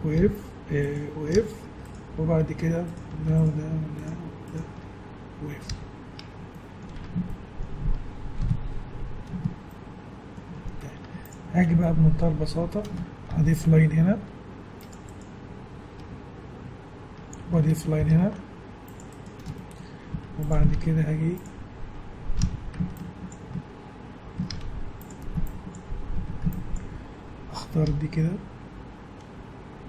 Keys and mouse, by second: 0.7 g, 1.4 f, 5.7 f, 7.0 Tab, 8.4 KP_1, 11.0 Tab, 13.3 ctrl+r, 18.0 ctrl+r, 20.1 z, 20.7 ctrl+Tab, 22.4 a, 23.3 click, 24.5 ctrl+Tab, 25.5-26.6 drag, 26.2 a, 26.8-29.3 drag, 27.9 g.